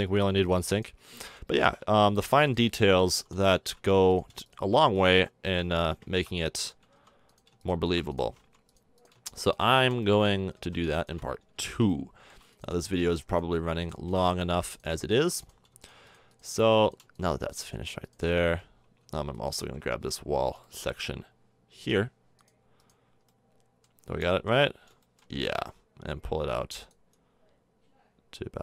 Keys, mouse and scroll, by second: 1.8 f, 3.1 f, 3.4-5.1 middle drag, 5.1 shift+f, 5.3 middle click, 6.9 f, 8.5 f, 9.7 f, 10.5 ctrl+z, 11.5 f, 13.5 f, 15.2 f, 16.5 f, 18.4 f, 19.0 Tab, 19.5 Tab, 20.3 middle click, 23.2 middle click.